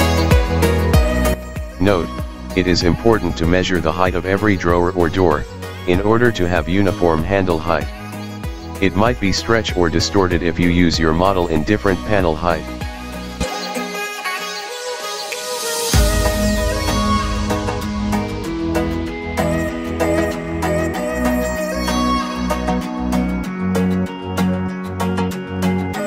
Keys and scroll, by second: 3.4 Escape, 4.0 m, 9.1 Escape, 10.6 Escape, 14.6 Escape, 17.7 Escape.